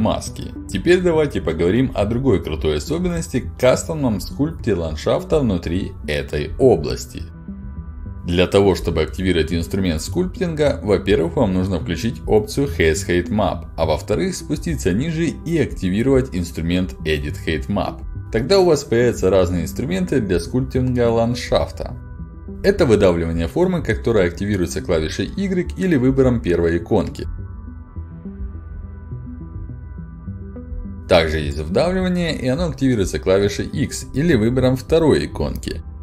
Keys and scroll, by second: 3.6 ctrl+alt+d, 8.3 ctrl+alt+d, 17.1 ctrl+alt+d, 27.4 Return, 32.3 Return.